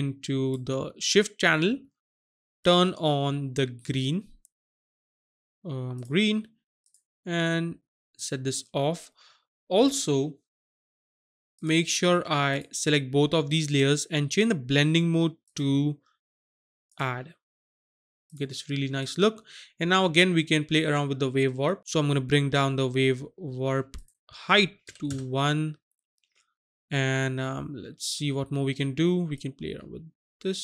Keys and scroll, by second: 24.9 KP_1, 25.1 Return.